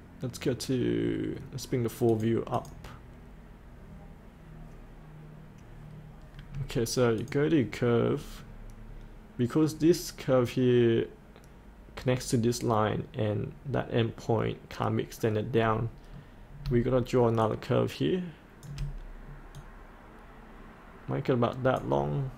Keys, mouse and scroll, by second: 6.0-7.2 scroll up 1, 7.2-8.2 drag, 8.2-8.7 scroll down 1, 17.4 shift+click, 19.5-22.3 drag.